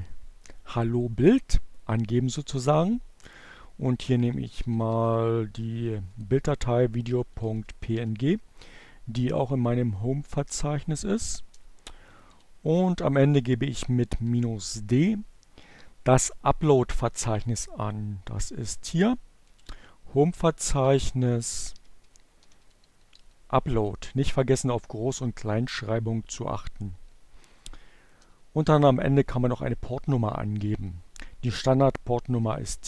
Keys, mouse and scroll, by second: 2.6-6.4 typing, 10.5 space, 13.1 d, 13.3 space, 18.4 shift+7, 20.6-22.9 typing, 26.1 space, 30.7-31.6 typing.